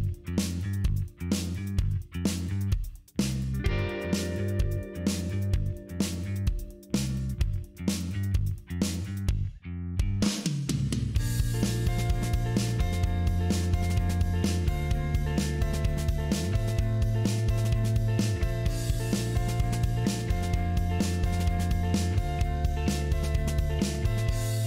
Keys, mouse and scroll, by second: 0.5 click, 1.5 click, 3.3 click, 4.2 click, 5.4 click, 6.7 click, 7.4 click, 8.6 click, 10.0 click, 11.8-22.1 drag, 23.2-23.7 scroll down 2, 23.9 middle click, 24.5 scroll up 2.